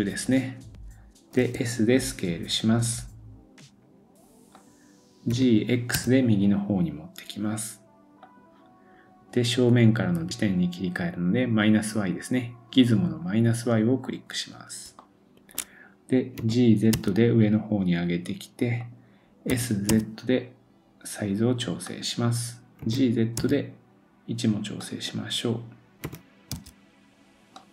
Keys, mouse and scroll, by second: 11.6 click, 13.6-14.6 scroll up 1, 14.6 scroll down 1, 15.0 shift+middle click, 16.4 g.